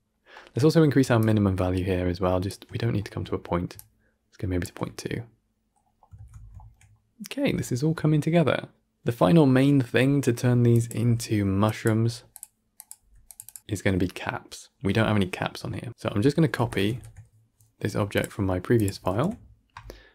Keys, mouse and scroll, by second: 1.2-2.9 shift+drag, 2.9 shift+middle click, 3.8-4.9 shift+drag, 4.9-6.2 middle drag, 6.2 scroll down 1, 6.5-7.3 shift+middle drag, 7.3 scroll up 1, 7.5-10.6 shift+middle drag, 10.6 drag, 13.3-18.7 drag.